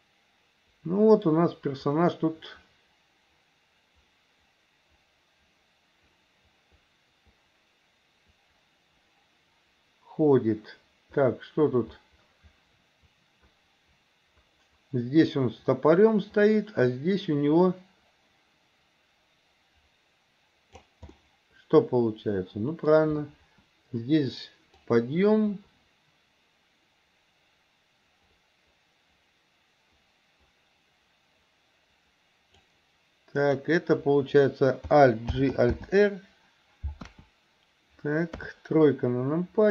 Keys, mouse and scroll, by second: 21.2-22.9 middle drag, 24.9-32.7 drag, 33.4 click, 35.4 alt+g, 35.7 alt+r, 37.1 KP_1, 38.4 KP_3.